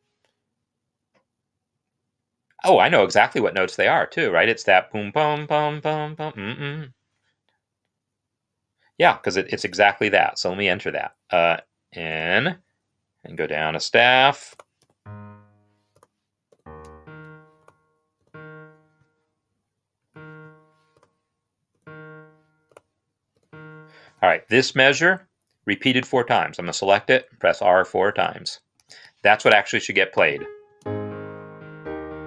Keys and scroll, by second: 11.1 typing, 15.2-16.9 typing, 16.9 ctrl+Up, 18.3-19.1 typing, 20.7-23.4 typing, 24.5 Escape, 26.7 r, 28.7 Escape, 28.7 r, 30.6 space.